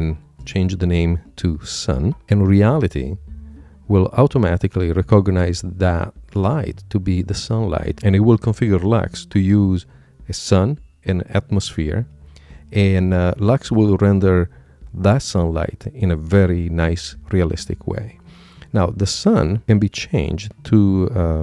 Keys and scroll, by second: 2.2 shift+s.